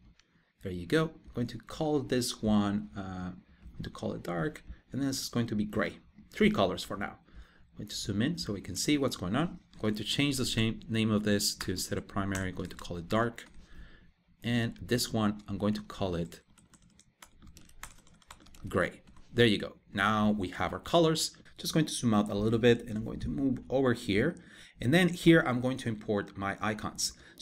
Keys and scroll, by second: 9.4 super+r, 15.0 super+r.